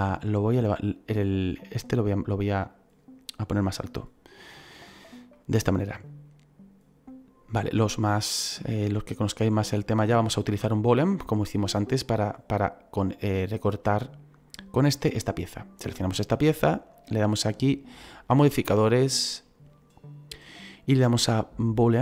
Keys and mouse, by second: 0.1 click, 2.6 click, 4.2 click, 5.2 middle click, 9.5 middle click, 12.1 right click, 17.5 click, 19.1 click, 21.7 click.